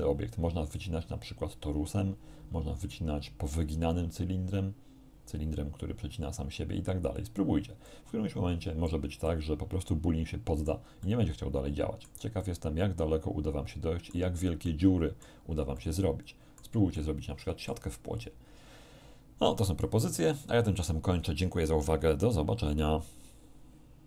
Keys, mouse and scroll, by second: 7.2 scroll down 1, 7.9-9.1 middle drag, 9.3-10.9 middle drag, 11.1-12.3 middle drag, 12.5 middle click, 12.5-14.3 drag, 14.7 click, 15.8 shift+click, 15.9-16.9 shift+middle drag, 17.0 shift+click, 17.1 shift+middle click.